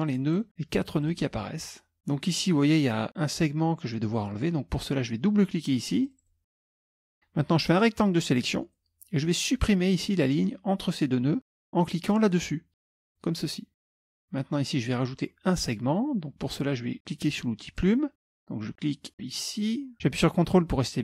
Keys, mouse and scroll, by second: 0.4 click, 1.1 click, 6.1 click, 7.6-9.0 drag, 13.0 click, 13.9 click, 17.8 click, 19.7 click.